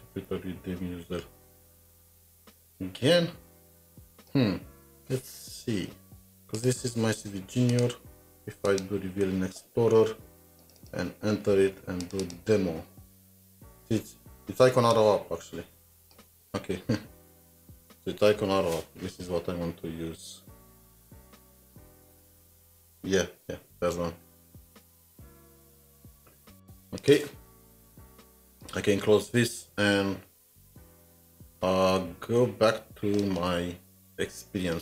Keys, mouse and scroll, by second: 7.7 ctrl+Tab, 7.9 right click, 10.8 right click, 10.8 double click, 12.3 double click, 17.4 click, 17.6 ctrl+c, 17.7 typing, 18.7-19.0 scroll down 3, 19.4 scroll down 3, 20.1 scroll down 2, 20.7 scroll down 3, 21.3-21.7 scroll down 2, 22.1 scroll down 2, 23.5 scroll up 5, 26.0 middle click, 33.0 middle click.